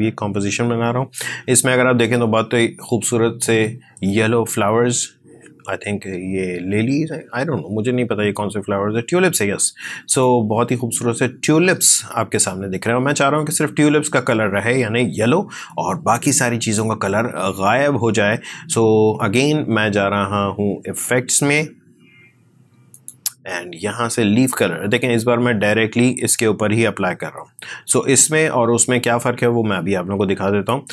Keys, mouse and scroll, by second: 1.1 space, 10.1-19.0 drag, 21.0-30.9 drag.